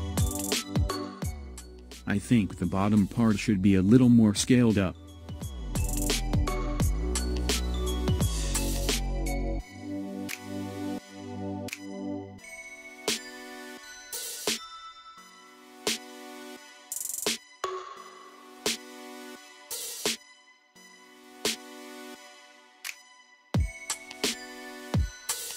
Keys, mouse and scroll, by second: 3.1 Tab, 5.3 /, 10.2 KP_1, 12.1 shift+z, 13.3 click, 17.0 /, 18.5 shift+z, 19.4-21.1 middle drag, 21.1 s.